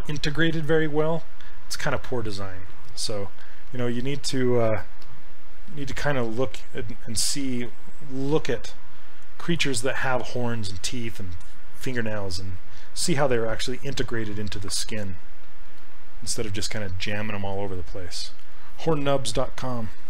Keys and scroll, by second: 7.3 s.